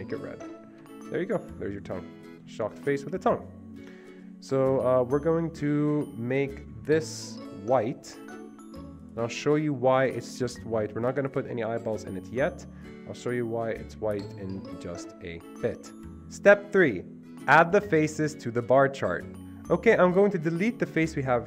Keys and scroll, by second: 1.2 Escape.